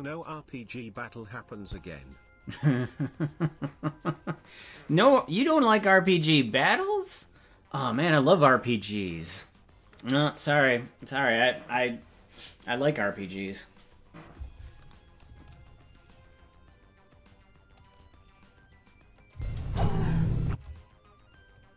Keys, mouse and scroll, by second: 1.6 click, 19.3 space.